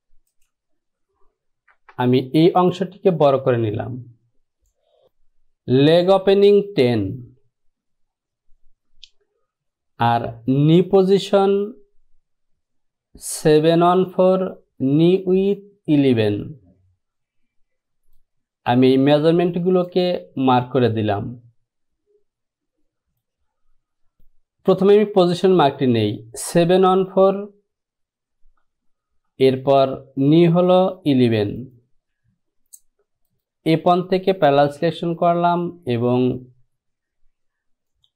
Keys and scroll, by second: 1.9 Return.